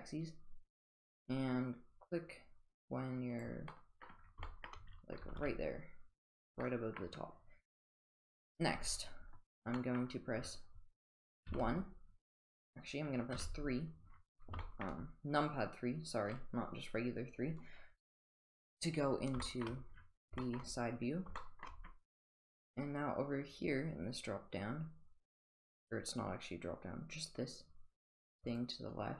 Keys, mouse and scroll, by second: 3.7-4.0 middle drag, 4.4 shift+middle drag, 5.2 g, 6.7-7.0 middle drag, 9.8 middle click, 11.5 KP_1, 13.3 KP_3, 14.6 shift+middle drag, 19.4 shift+middle drag, 20.4 shift+middle drag, 21.4 shift+middle drag, 28.5 click.